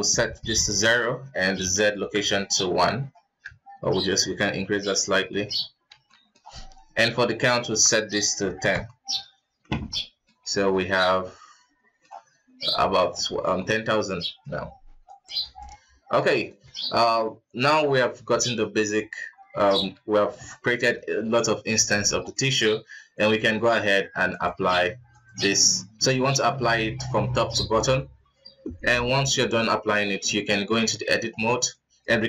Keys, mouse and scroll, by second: 3.0 scroll up 1, 4.1-5.3 shift+drag, 5.3 middle click, 5.6 scroll up 2, 5.9 ctrl+s, 6.1-7.2 middle drag, 7.2-9.2 drag, 9.2-9.7 scroll down 3, 9.7 alt+a, 10.0-10.3 middle drag, 10.3 scroll up 3, 10.7-14.5 middle drag, 14.5 KP_1, 15.1 right click, 15.4 right click, 15.7 g, 16.7-18.0 middle drag, 18.0 click, 18.4 scroll down 2, 18.6 middle click, 19.3 scroll up 2, 19.7 ctrl+s, 21.4 KP_1, 22.0-22.3 scroll up 1, 22.3-23.6 shift+middle drag, 23.6 click, 24.3-25.3 drag, 25.7-26.6 drag, 27.0-28.8 drag, 28.8-29.1 scroll down 3, 29.1-29.5 middle drag, 29.5 scroll up 2, 30.3 Tab, 30.7 a, 30.9 middle click, 31.3 ctrl+s, 31.7 middle click, 32.1 scroll up 2.